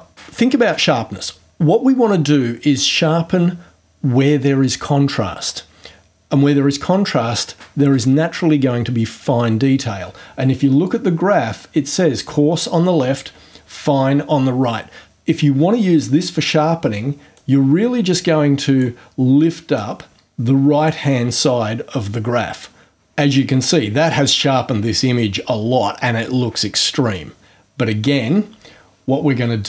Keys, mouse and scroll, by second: 17.3-19.0 drag, 19.7-21.1 drag.